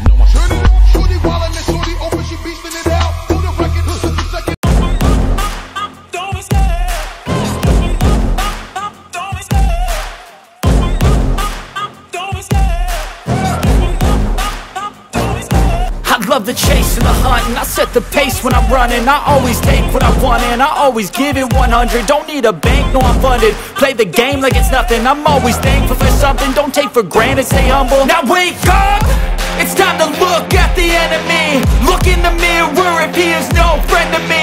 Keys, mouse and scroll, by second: 4.5 click, 12.2 ctrl+j, 28.0 ctrl+a, 30.7 ctrl+v, 34.3 ctrl+d.